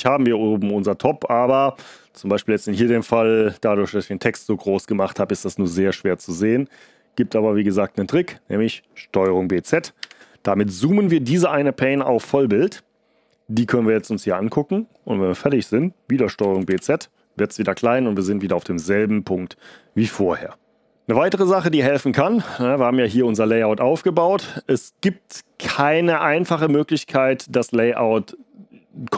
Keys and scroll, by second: 9.6 ctrl+b, 9.9 z, 16.4 ctrl+b, 16.6 z.